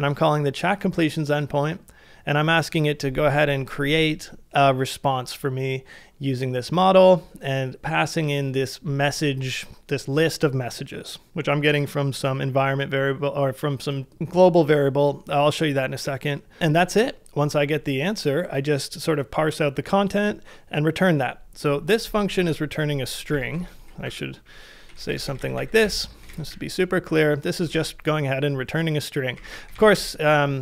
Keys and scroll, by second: 22.4-27.0 typing, 27.8 ctrl+c, 29.1-30.6 typing.